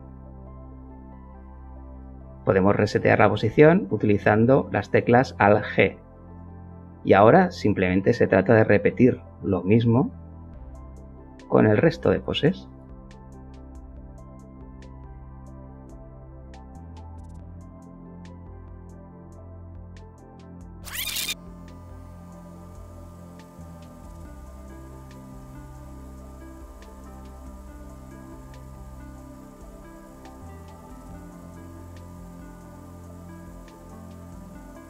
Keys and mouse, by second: 2.9 alt+g, 5.4 click, 6.5 g, 6.8 x, 7.9 KP_1, 8.6 Return, 9.9 a, 12.3 click, 13.3 click, 14.2 click, 14.4 click, 15.0 click, 16.4 shift+b, 16.7 Return, 20.7 alt+g, 21.4 click, 21.4 g, 21.9 x, 22.4 KP_1, 22.7 Return, 23.1 a, 23.7 click, 24.4 click, 24.5 click, 25.1 shift+c, 26.1 alt+g, 26.7 click, 26.7 g, 27.2 x, 27.5 KP_1, 27.7 Return, 28.3 a, 28.9 click, 29.2 click, 29.7 click, 30.3 shift+d, 30.4 Return, 31.4 g, 31.5 x, 31.8 KP_1, 32.0 Return, 33.5 g, 33.6 x, 34.0 KP_1, 34.1 KP_Subtract, 34.3 Return, 34.7 a.